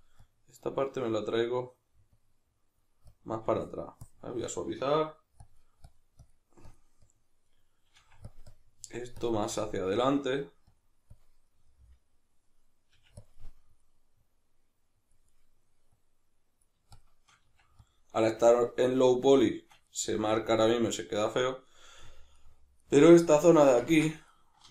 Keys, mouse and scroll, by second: 0.2-1.3 drag, 1.3 middle click, 2.1-4.8 drag, 4.8 middle click, 5.4-7.5 drag, 7.5 middle click, 8.0 f, 8.5-11.5 drag, 11.5-13.3 middle drag, 12.9 f, 13.3 click, 13.3 middle click, 14.2-15.3 drag, 15.3 middle click, 15.9-18.0 drag, 17.5 f, 18.3 f, 18.9-19.9 drag, 19.9-23.3 middle drag, 23.3 shift+click, 23.9 ctrl+z, 24.1-24.7 middle drag.